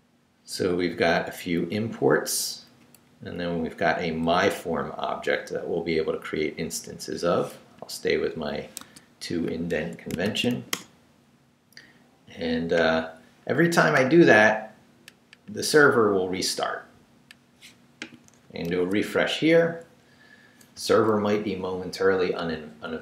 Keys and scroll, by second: 1.7 Up, 2.9 Down, 4.2 Left, 6.8 Right, 7.5 BackSpace, 8.8 Tab, 9.7 Escape, 10.2 shift+;, 10.5 shift+w, 10.7 Return, 18.7 super+r, 22.3 super+r.